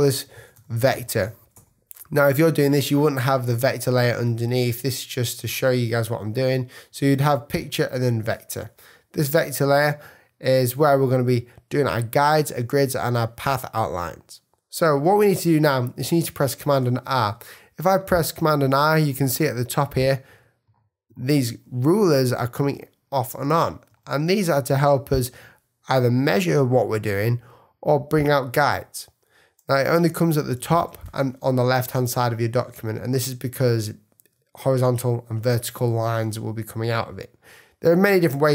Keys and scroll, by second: 15.3 super+r, 17.2 super+r, 30.0 super+r.